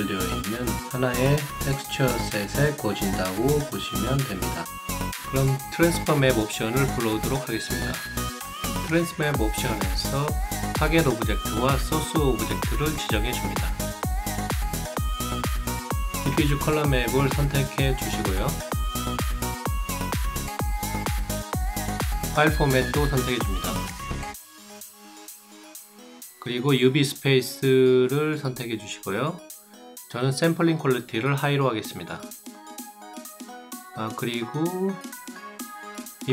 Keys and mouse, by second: 3.0 ctrl+click, 4.3 ctrl+click, 5.5 ctrl+click, 7.4-8.6 ctrl+drag, 9.6 ctrl+click, 12.1 ctrl+click, 13.1 ctrl+click, 18.5 ctrl+click, 18.8 ctrl+click, 20.0 ctrl+click, 26.3 ctrl+click, 27.3 ctrl+click, 28.2 ctrl+click, 30.1 ctrl+click.